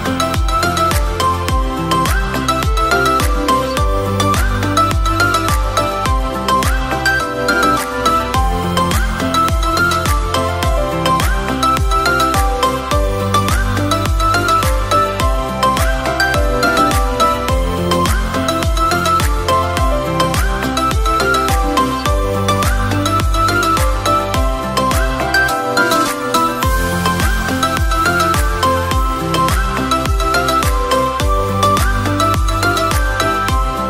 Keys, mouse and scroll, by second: 0.3 click, 1.0-1.3 middle drag, 1.3 Tab, 1.6 click, 2.0-2.6 middle drag, 2.6-3.2 scroll down 3, 3.2-7.6 middle drag, 8.0-8.3 scroll up 2, 8.3-10.8 middle drag, 10.8 click, 12.0 Tab, 13.7 Tab, 14.9 shift+a, 16.5-18.0 middle drag, 18.0 click, 19.0 s, 20.4 middle click, 21.4 ctrl+r, 23.2 s, 25.1 middle click, 26.0 ctrl+r, 28.5 s, 31.4 Tab, 31.9-33.7 right drag, 33.7 Tab.